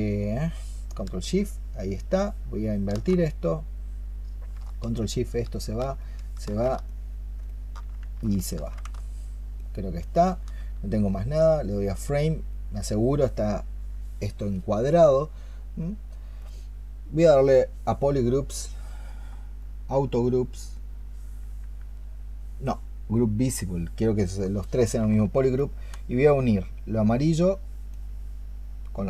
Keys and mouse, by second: 2.0 ctrl+shift+click, 4.8 ctrl+shift+click, 5.9 ctrl+shift+click, 6.7 alt+click, 7.3 alt+click, 8.2 ctrl+shift+click, 8.8 alt+click, 9.4 alt+click, 12.6 double click, 25.4 ctrl+shift+click, 26.6 ctrl+shift+click, 27.8 ctrl+shift+click, 28.8 ctrl+shift+click.